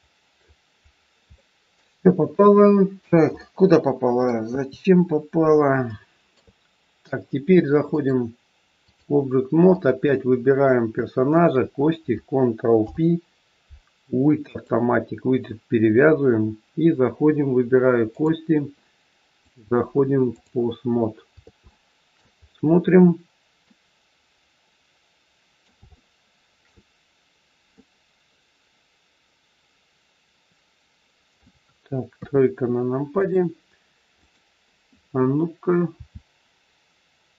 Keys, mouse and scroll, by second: 0.8-1.2 scroll down 6, 1.3 shift+middle click, 2.4 KP_1, 2.8 scroll down 2, 3.4 middle click, 4.5 KP_3, 5.3 scroll up 3, 5.9 shift+middle click, 7.8 click, 9.7 click, 11.2 shift+click, 11.3 shift+click, 12.7 ctrl+p, 18.2 click, 19.4 click, 20.8-21.1 scroll up 2, 21.7 shift+middle click, 22.3-23.5 scroll up 3, 23.5 middle click, 25.9 shift+middle click, 27.7 middle click, 32.2 KP_3, 33.2 click, 34.3 click, 35.9 r.